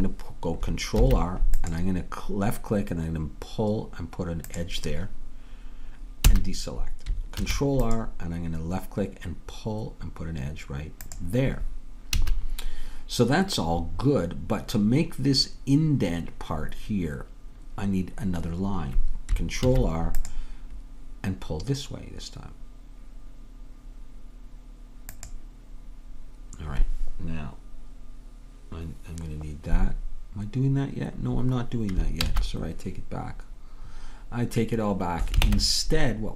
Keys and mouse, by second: 1.1 ctrl+r, 6.3 a, 7.5 ctrl+r, 12.2 a, 19.7 ctrl+r, 32.3 ctrl+z, 35.5 ctrl+Tab.